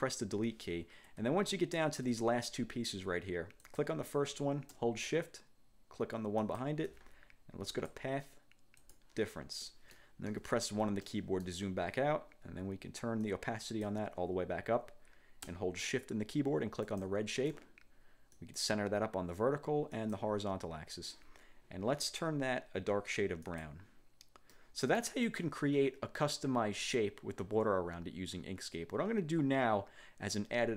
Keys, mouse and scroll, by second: 0.4 Delete, 1.4-2.1 ctrl+scroll down 4, 3.8 click, 6.5 shift+click, 7.8 click, 8.9 click, 9.7 middle click, 10.1 click, 10.3 1, 11.2 click, 13.3 click, 17.0 shift+click, 18.5 click, 20.1 click, 23.6 click, 24.6 middle click, 25.4 click.